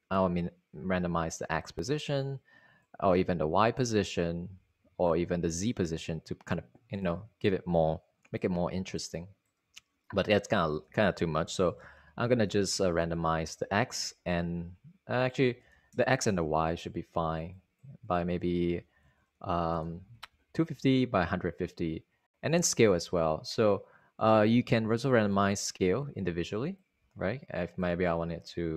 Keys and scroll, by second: 11.3 super+a, 11.8-13.1 typing, 13.7 Return, 16.1 super+a, 18.9 super+a, 19.3-20.4 typing.